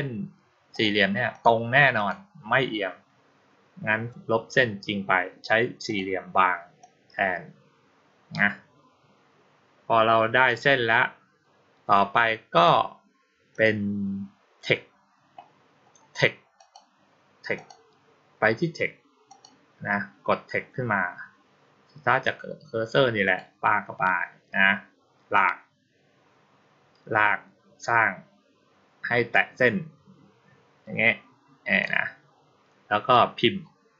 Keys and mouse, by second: 0.6 click, 1.2 click, 1.8 click, 5.7 click, 6.7-10.3 drag, 12.4 click, 13.4 click, 16.4 click, 17.4 click, 19.1 click, 23.1 click, 25.2-31.7 drag.